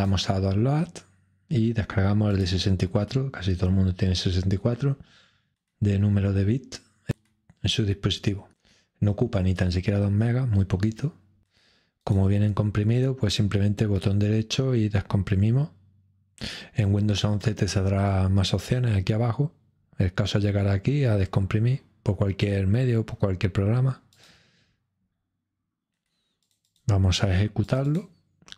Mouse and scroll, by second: 2.2-3.2 drag, 12.0 right click, 24.2 click, 26.4-28.5 drag.